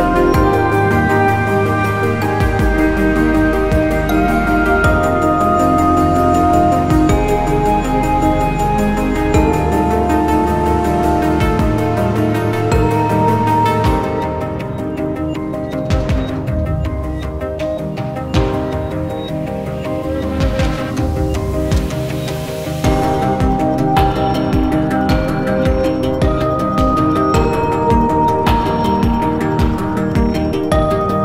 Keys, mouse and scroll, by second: 1.2-2.0 scroll up 1, 2.1 alt+middle click, 2.4 alt+click, 3.2-3.5 scroll up 1, 4.4 scroll down 1, 5.5-8.3 scroll down 1, 8.3 scroll up 1, 8.4 alt+middle click, 10.6 scroll up 1, 16.2 scroll up 1, 16.5-18.6 scroll down 1, 18.6-19.3 scroll up 1, 20.3-22.5 scroll down 1, 22.9 double click, 28.4-30.1 scroll down 1, 30.6 ctrl+c, 30.8 ctrl+c.